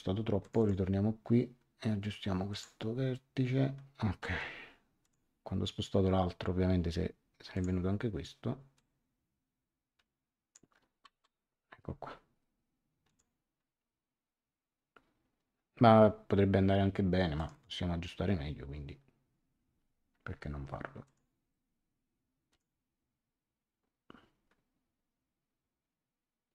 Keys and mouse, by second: 0.4 click, 2.5 click, 5.0 click, 7.5 click, 8.7 click, 11.0 Return, 13.0 click, 17.3 click, 21.0 click, 22.5 click.